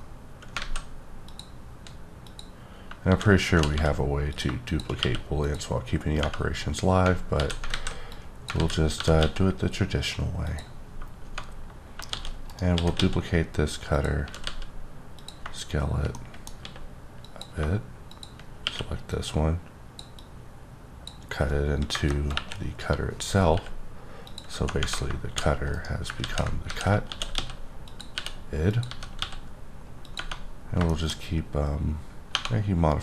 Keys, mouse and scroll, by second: 0.6 a, 1.3 click, 2.2 click, 3.0 shift+d, 3.5 z, 3.7 z, 4.3 click, 5.0 q, 5.4 click, 6.3-7.0 scroll up 2, 7.4 alt+z, 7.7 alt+a, 8.1 click, 8.6 z, 9.0 g, 9.2 x, 10.4 click, 10.8-11.7 scroll down 2, 11.7 scroll up 2, 12.1 shift+d, 12.5 right click, 12.7 s, 12.9 x, 13.9 click, 14.2 s, 14.4 z, 15.2 click, 16.1 middle click, 16.6 s, 17.6 shift+click, 18.6 q, 19.1 click, 20.2 click, 21.9 KP_0, 22.3 KP_1, 23.5 r, 24.2 click, 25.3 d, 25.7 right click, 26.2 ctrl+z, 26.7-29.2 typing, 27.8 click, 28.7 click, 30.0 click, 30.4-30.8 scroll down 2, 30.9 shift+middle click, 31.1-32.3 scroll up 1, 32.3 typing.